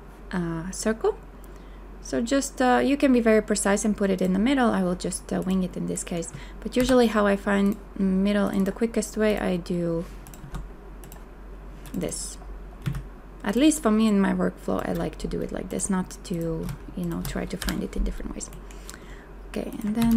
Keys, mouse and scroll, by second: 6.8 g, 10.6 Escape, 12.9 a, 17.0 shift+click, 17.6 Delete, 19.8 ctrl+click, 20.0 ctrl+c.